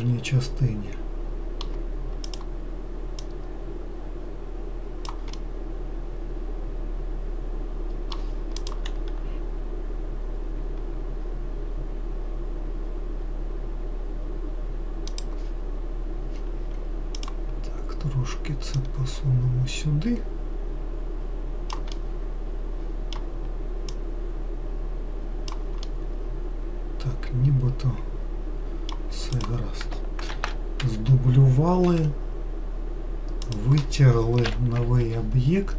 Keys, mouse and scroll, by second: 2.5 click, 3.4 click, 5.6-8.8 middle drag, 17.5 click, 19.0 click, 22.2-24.2 middle drag, 24.2 click, 26.1-29.2 middle drag, 29.6 click, 30.6 shift+d, 32.2 e, 34.7 ctrl+l.